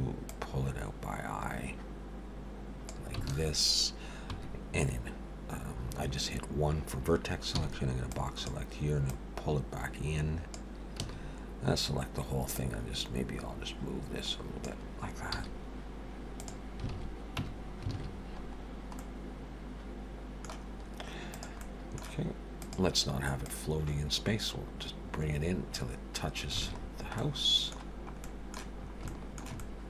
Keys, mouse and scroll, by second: 0.3 click, 3.3 alt+a, 4.3 1, 7.6 b, 9.1 click, 11.0 a, 12.5 click, 15.3 z, 16.9 alt+a, 17.4 Tab, 17.9 alt+a, 18.1-19.0 scroll down 4, 19.0 middle click, 19.0-20.2 scroll down 1, 20.7 scroll up 2, 21.3 click, 21.6 middle click, 22.5 click, 23.5 click, 26.6 alt+a, 26.8-27.2 scroll down 4, 27.2 middle click, 27.9 scroll down 1, 28.2 middle click, 28.8 scroll up 3, 29.1 shift+middle click, 29.6 middle click.